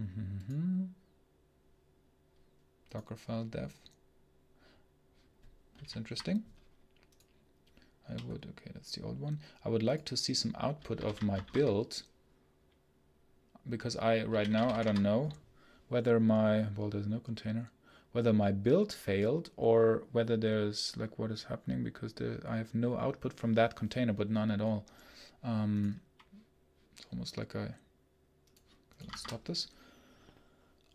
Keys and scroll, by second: 29.1 shift+Escape.